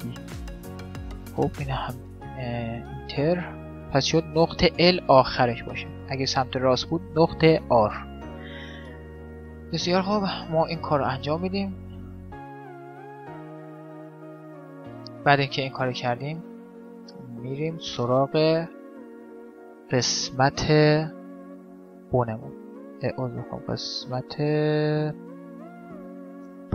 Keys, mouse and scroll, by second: 3.5-5.3 drag, 10.2-11.5 middle drag, 11.5-17.7 right drag, 12.1 middle click, 16.5 middle click, 17.7-20.3 middle drag, 21.4-23.4 drag, 24.3-26.3 middle drag, 25.2 Tab.